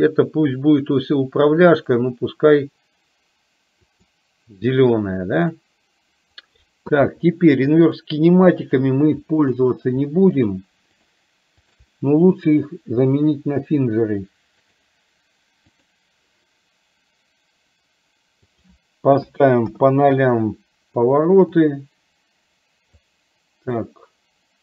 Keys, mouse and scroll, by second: 2.0-4.3 drag, 5.4 click, 8.7 shift+click, 9.5 shift+click, 10.5 shift+click, 11.8 shift+click, 12.5-14.8 drag, 15.8-16.3 drag, 18.7-20.0 drag, 21.7-23.0 drag, 23.8-24.6 drag.